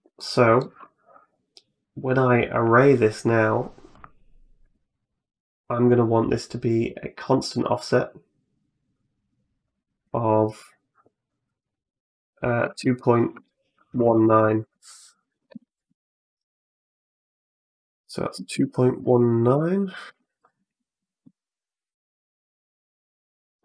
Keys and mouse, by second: 0.0 middle click, 2.1 right click, 3.7 click, 6.7 click, 7.0 click, 7.4 click, 9.5-15.9 drag, 14.2 2, 17.1-20.6 drag, 22.2 click.